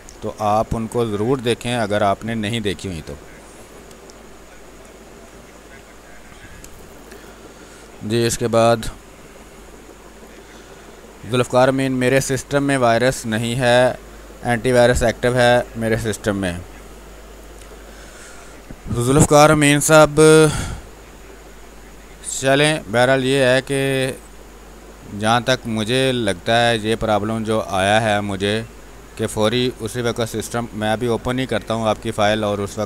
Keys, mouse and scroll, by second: 0.0 shift+space, 0.4 alt+click, 1.7 click, 2.3 r, 3.5 b, 4.4 click, 4.6 ctrl+space, 4.8 ctrl+click, 5.4 space, 5.8 r, 5.9 click, 6.3 b, 6.6 space, 6.9-14.6 ctrl+drag, 19.1 space, 19.4 click, 19.6 space, 20.7-24.3 drag, 24.4 space, 24.9-32.2 drag, 32.2 space, 32.4 click, 32.7 space.